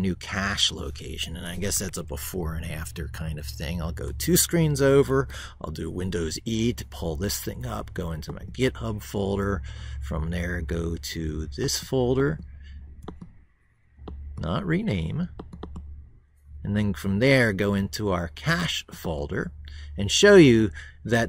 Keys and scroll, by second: 1.7 ctrl+super+Right, 4.9 super+e.